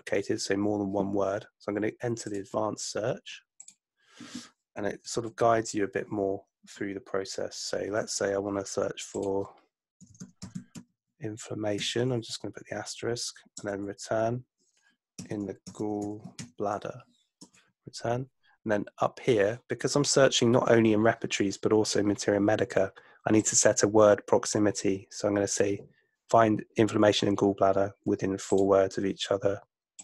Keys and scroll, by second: 5.2 super+F2, 9.8-11.8 typing, 13.6 Return, 15.0-16.9 typing, 17.4 Return.